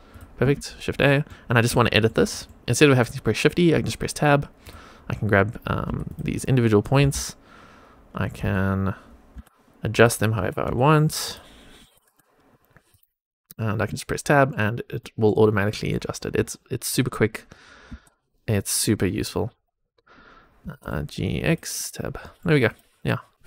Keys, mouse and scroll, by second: 0.1 click, 0.5 shift+a, 0.9 middle click, 1.7 shift+middle click, 2.2 middle click, 3.6 Tab, 4.5 click, 5.7 1, 6.0 click, 6.9 g, 10.3 e, 11.7 e, 13.2 middle click, 13.2 scroll down 1, 13.8 Tab, 14.2 middle click, 14.9 middle click, 15.5 middle click, 16.4 Tab, 16.8 click, 17.8 g, 17.9 x, 19.5 click, 20.5 g, 21.7 Tab, 22.1 middle click, 22.6 click, 23.0-23.3 scroll up 1, 23.3 middle click, 23.3 click.